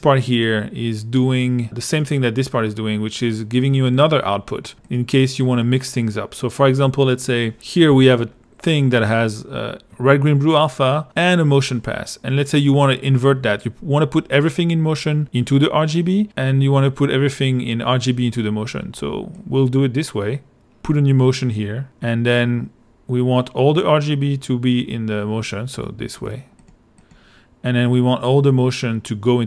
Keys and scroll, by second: 7.9 l.